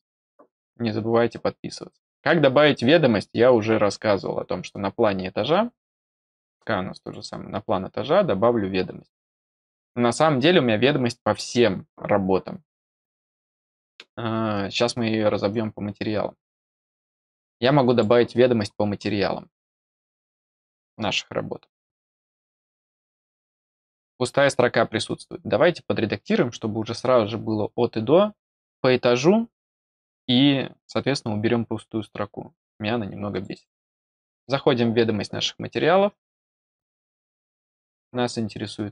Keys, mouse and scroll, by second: 4.1-4.5 scroll down 4, 5.9 click, 6.9 click, 7.1 click, 8.5 middle click, 8.5 scroll down 2, 8.7 middle click, 9.3 scroll down 1, 13.9 scroll down 1, 14.7 scroll down 1, 15.1 scroll, 15.4-16.5 drag, 15.6-16.5 scroll, 17.8 click, 18.6 middle click, 18.8-19.3 scroll up 2, 20.1 click, 21.3 scroll down 1, 22.7 click, 33.2 click, 33.5 click, 36.8 click, 37.4 click.